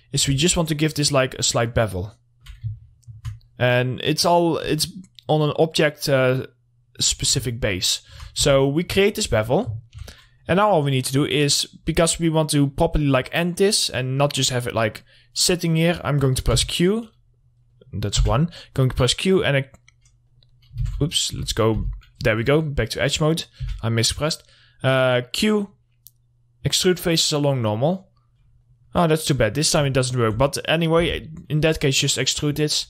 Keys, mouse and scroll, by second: 0.8-3.0 shift+drag, 3.1 scroll down 2, 3.2 alt+middle click, 3.8-4.2 scroll up 2, 4.2 middle click, 5.0 click, 8.0 alt+middle click, 8.9 w, 9.1 middle click, 14.3 middle click, 16.8 1, 18.2 middle click, 18.7 q, 19.6 click, 20.8 right click, 21.3 ctrl+z, 21.8 2, 22.2 2, 22.7 middle click, 24.1 q, 25.8 click, 29.1 right click, 29.7 middle click, 30.1 scroll down 1, 30.4 alt+middle click, 31.5 r, 31.7-32.2 scroll up 1, 32.2 middle click.